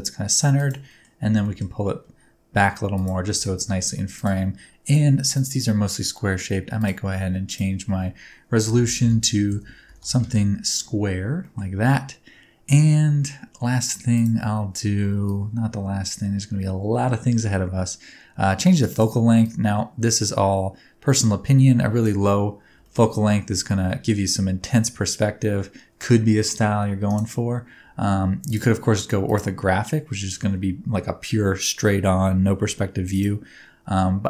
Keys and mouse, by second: 0.5 click, 0.9 middle click, 1.3 g, 1.4 middle click, 2.9 click, 3.3 g, 3.5 z, 4.1 shift+click, 5.3 click, 7.5-10.8 drag, 9.0 KP_0, 11.4 middle click, 15.2-18.9 drag, 19.5-22.0 drag, 22.7 g, 28.5-29.3 drag, 33.1-34.2 drag.